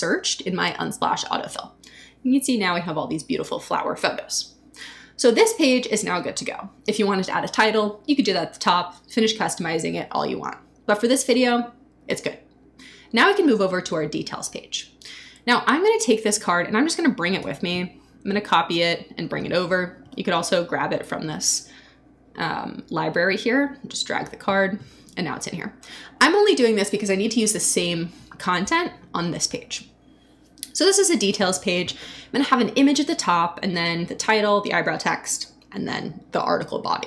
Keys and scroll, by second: 17.4 super+c.